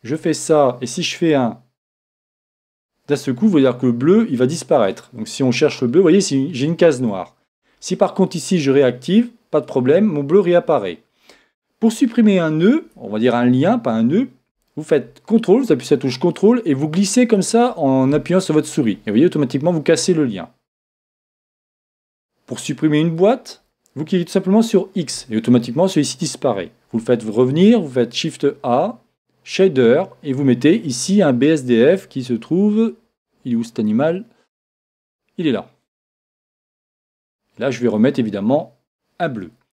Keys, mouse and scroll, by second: 2.5 shift+z, 5.1-8.6 middle drag, 8.6-10.4 drag, 16.3-18.0 drag, 20.9-22.8 drag, 23.2-24.9 drag, 27.0 shift+a, 37.9-39.7 drag.